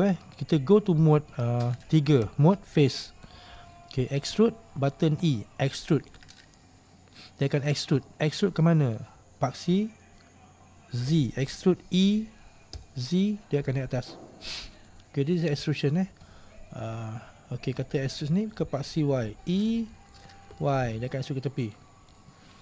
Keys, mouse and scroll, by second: 2.4 3, 3.2 right click, 4.2 middle click, 9.5-11.2 middle drag, 11.2 e, 18.1 right click, 18.8-20.1 middle drag, 20.1 e, 22.3-22.6 middle drag.